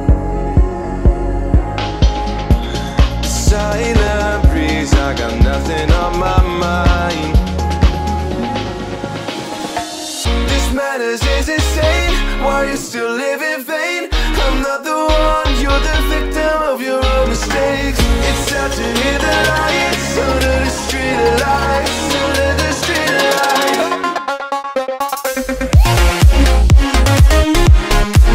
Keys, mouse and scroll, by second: 0.2-2.0 middle drag, 2.0-2.4 scroll up 2, 2.4-3.0 scroll down 3, 3.0-3.6 scroll down 1, 3.7 click, 4.2-4.6 scroll up 2, 4.7-5.1 scroll down 4, 5.1-7.6 middle drag, 7.6 click, 8.7 click, 9.3 scroll up 2, 11.1 click, 13.0 shift+click, 14.7 alt+m, 15.8 click, 17.9 click, 18.4 scroll up 1, 19.6 click, 20.6 shift+click, 22.1 alt+m, 23.4 click, 23.6 click, 24.4 Tab, 25.2-26.0 scroll down 8, 26.0 click, 27.7 click, 28.1-28.3 scroll down 9.